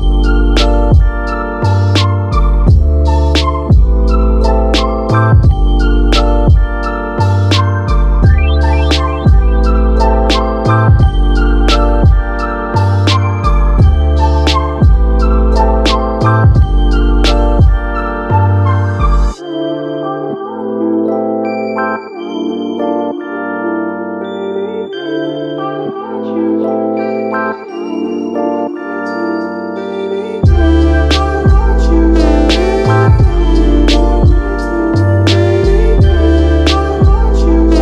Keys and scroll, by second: 23.7 super+z.